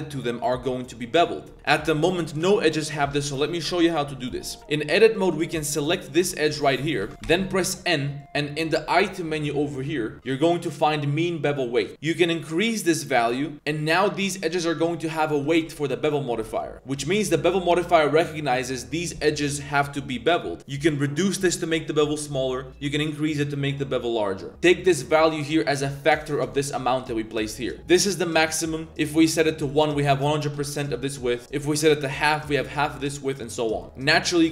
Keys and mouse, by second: 2.1 middle click, 4.1 middle click, 4.5 Tab, 5.0 alt+click, 5.3 z, 6.1 alt+shift+click, 6.7 alt+shift+click, 7.1 ctrl+z, 7.1 n, 7.3 n, 11.9-14.5 drag, 14.8 click, 15.5 shift+drag, 16.2 middle click, 20.7-24.5 drag, 24.9-26.0 drag, 26.6-27.7 drag, 27.9 click, 29.2 click, 31.5 click, 33.1 click, 33.8 z.